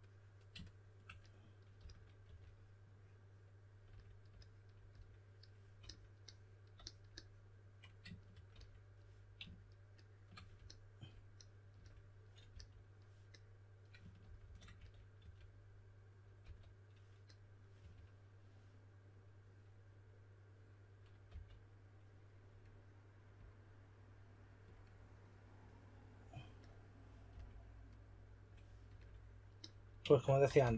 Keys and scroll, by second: 1.5-2.7 typing, 12.4 s, 13.9-16.3 typing, 17.7 typing, 21.2 typing, 27.2 s, 30.1-30.7 typing.